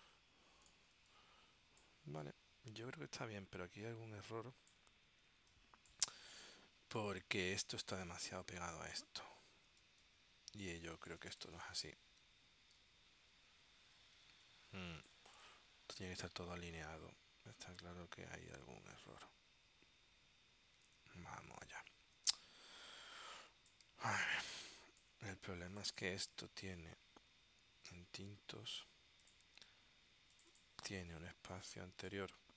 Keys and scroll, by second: 1.1 space, 9.9 space, 14.5 space, 21.0 super+Tab, 22.4 space, 24.4 space.